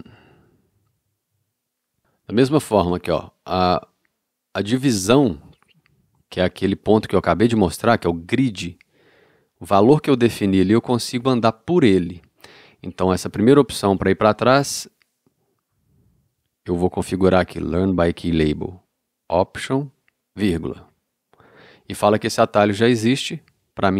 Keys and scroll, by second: 0.2 i, 1.1 o, 20.4 alt+,.